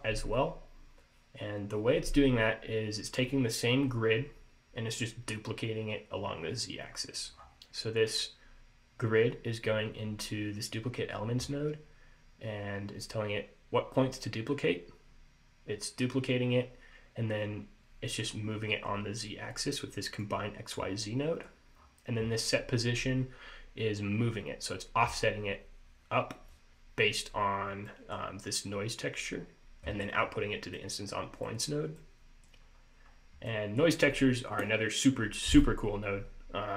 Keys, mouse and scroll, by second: 7.1 middle click, 7.5-10.1 scroll up 2, 20.3 click, 21.1 middle click, 21.9-22.8 scroll up 2, 27.4-28.0 scroll down 2, 28.0 middle click, 30.9 middle click, 31.6 middle click, 32.1 middle click, 32.7-33.6 scroll up 2, 33.6 middle click.